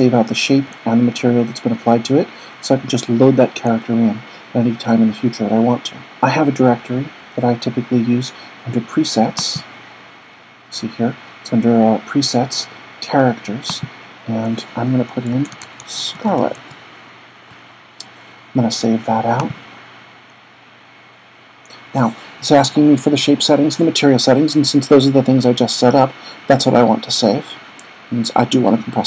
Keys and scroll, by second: 15.0-17.1 typing.